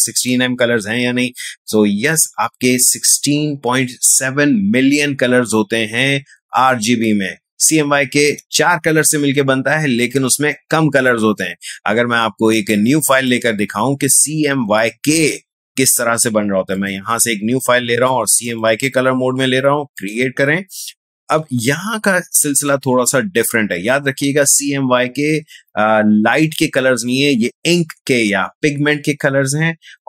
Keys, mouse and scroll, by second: 12.5 click, 16.7 click, 21.4 space, 21.6 click.